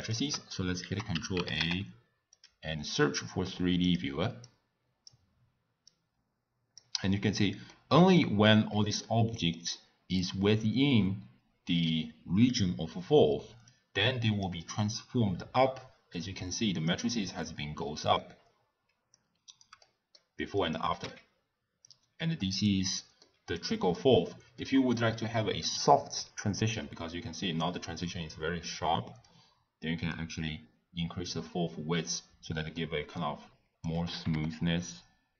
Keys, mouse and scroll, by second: 0.8 ctrl+a, 4.4 click, 5.9 click, 7.7-8.3 middle drag, 8.3-9.0 scroll up 2, 9.0-13.7 middle drag, 13.7-15.9 drag, 19.1 click, 19.8-20.6 middle drag, 20.6 click, 21.5 x, 21.8 click, 22.9-23.5 middle drag, 23.5 click, 24.6-27.6 middle drag, 29.2-31.6 drag, 31.6 scroll down 1, 31.6 scroll up 1, 31.7 scroll down 1, 31.7 scroll up 1, 32.1-32.7 scroll down 2, 32.7-34.1 middle drag, 34.1 g.